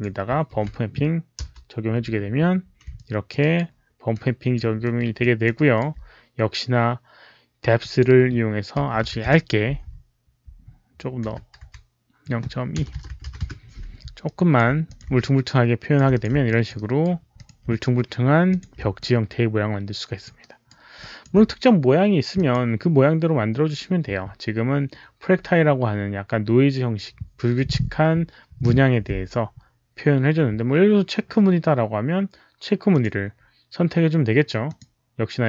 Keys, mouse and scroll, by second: 0.4 ctrl+v, 0.4 ctrl+c, 0.4 click, 1.0 ctrl+v, 2.7 Return, 2.7 ctrl+v, 2.7 ctrl+c, 2.8 alt+click, 3.3 alt+right click, 4.0 alt+click, 4.7 alt+middle click, 5.1 alt+click, 5.5 alt+right click, 5.8 Return, 5.8 alt+middle click, 7.7 alt+click, 8.7 KP_Decimal, 9.1 Return, 9.1 alt+click, 9.1 alt+right click, 9.1 alt+middle click, 9.1 KP_1, 9.1 KP_Decimal, 11.2 Return, 11.5 KP_2, 12.7-14.1 typing, 13.3 Return, 14.1 Return, 14.1-14.4 alt+drag, 14.7 alt+click, 15.1 alt+click, 16.0 click, 16.4 alt+click, 16.7 alt+right click, 17.2 alt+click, 18.4 alt+click, 18.9-20.1 alt+drag, 20.4 alt+right click, 20.9 alt+click, 22.2 alt+click, 29.2 alt+click, 29.2 alt+right click, 32.8 click, 34.6 click.